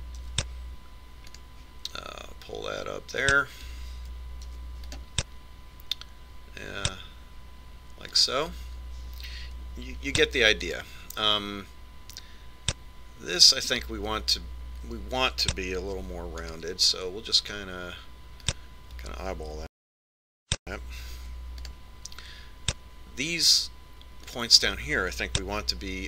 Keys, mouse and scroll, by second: 2.1 ctrl+r, 6.4 ctrl+r, 11.9 ctrl+r, 17.9 ctrl+r, 22.2 ctrl+r.